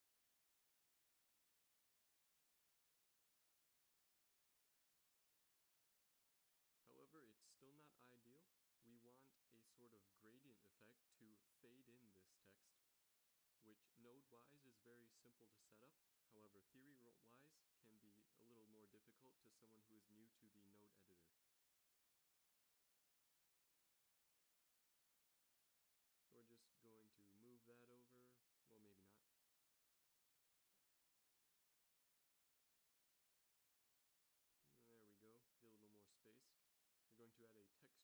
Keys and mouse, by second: 2.1 z, 2.3 z, 4.9 shift+z, 5.6 g, 17.5 z, 17.7 z, 18.7 shift+z, 19.5 z, 19.7 z, 23.4 click, 24.5 click, 25.1 middle click, 25.5 g, 26.4 a, 26.7 b, 26.8 drag, 27.7 g, 29.6 a, 34.4 g, 36.6 shift+a.